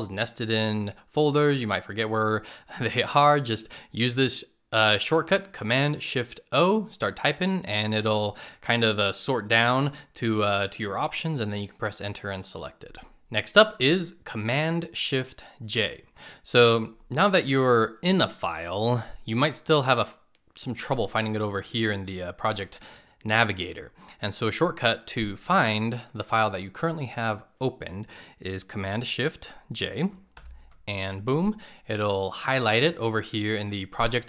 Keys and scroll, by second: 14.3 shift+super+j.